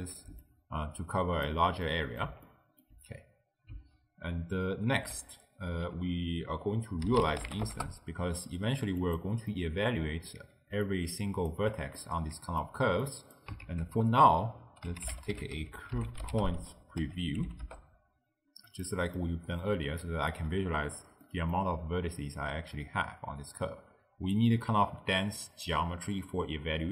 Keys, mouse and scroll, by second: 1.9-5.0 middle drag, 5.0 ctrl+a, 9.5-10.7 middle drag, 10.7 d, 10.9 click, 11.6 d, 11.7 d, 12.0-13.1 middle drag, 13.1 click, 13.7 ctrl+a, 19.2 middle click, 19.8 d, 20.0 right click, 20.4 d, 21.3 middle click, 22.2-25.4 drag.